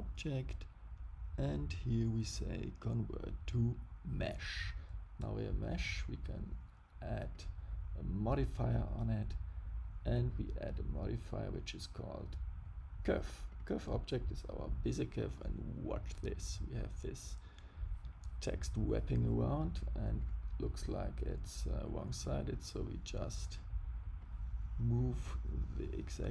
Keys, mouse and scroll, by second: 5.7 click, 7.3 click, 13.4 click, 20.1 click, 22.2 click.